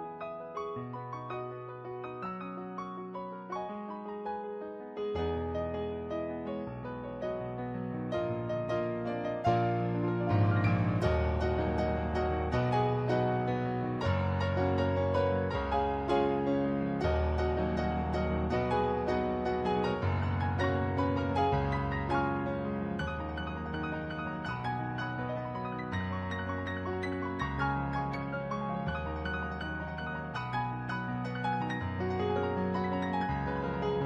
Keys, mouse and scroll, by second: 0.0 ctrl+z, 1.2 ctrl+z, 3.8 ctrl+z, 4.2 ctrl+z, 4.7 ctrl+z, 5.8 ctrl+z, 6.0 ctrl+z, 6.4 ctrl+z, 8.8 ctrl+z, 10.6 ctrl+z, 12.2 ctrl+z, 14.3 ctrl+z, 16.6 ctrl+z, 18.1 ctrl+z, 18.4 ctrl+z, 19.7 ctrl+z, 19.9 ctrl+z, 20.3 ctrl+z, 20.8 ctrl+z, 21.3 ctrl+z, 23.2 ctrl+z, 27.8 ctrl+z, 27.9 ctrl+z, 29.5 ctrl+z, 30.4 ctrl+z, 30.7 ctrl+z, 30.9 ctrl+z, 31.5 ctrl+z, 32.1 ctrl+z.